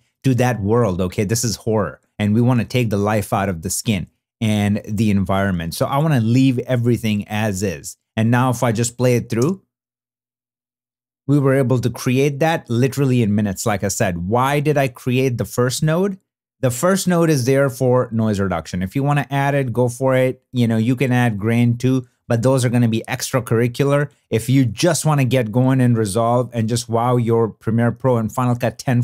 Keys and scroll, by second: 3.0 super+d, 5.2 shift+super+d, 9.4 space, 13.7 space.